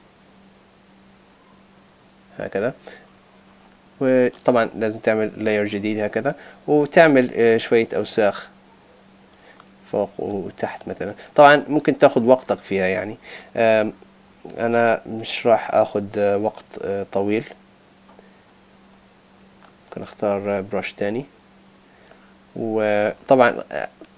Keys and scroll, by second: 7.3 super+z.